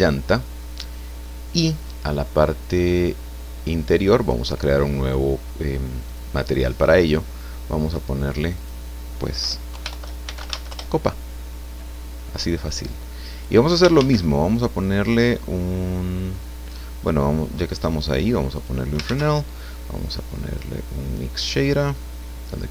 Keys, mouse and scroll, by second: 0.3 shift+Return, 4.2 click, 6.1 click, 8.4 click, 9.7 Home, 9.9 shift+End, 10.2 shift+c, 10.5 shift+a, 11.2 shift+Return, 12.8 click, 13.9 shift+a, 17.7 click, 18.5 click, 19.0 shift+a.